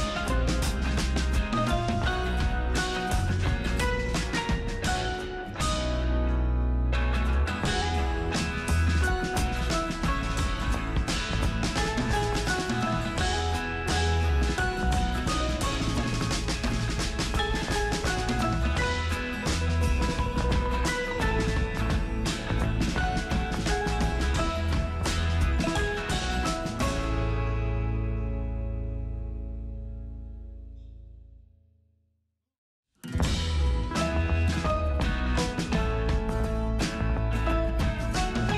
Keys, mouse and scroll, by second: 14.6 super+right click, 15.8 super+click, 17.4 super+click, 19.1 super+click, 21.8 super+click, 24.9 super+click, 27.3 super+click, 29.6 super+right click, 30.7 super+click, 33.8 super+click, 36.7 super+click.